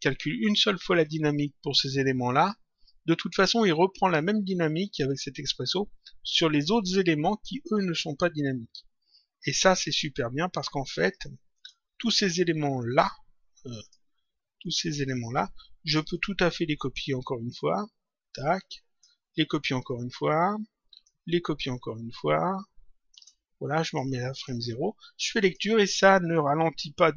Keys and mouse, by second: 9.5 click, 11.5 ctrl+click, 13.7 click, 14.6 shift+click, 16.0 click, 17.4 ctrl+click, 19.9 ctrl+click, 22.1 ctrl+click, 23.7 click, 25.3 click.